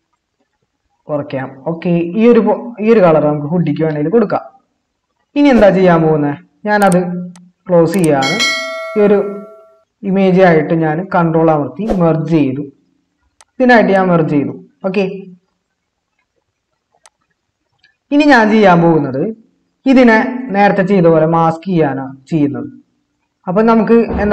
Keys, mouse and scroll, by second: 12.2 ctrl+e.